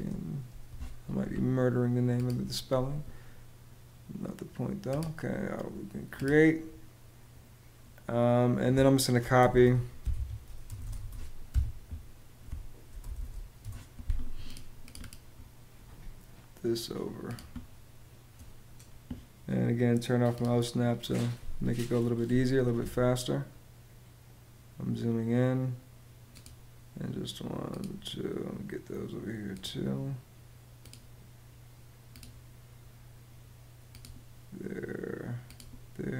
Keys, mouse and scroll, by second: 9.0-11.0 typing, 11.2 Escape, 12.5-13.5 typing.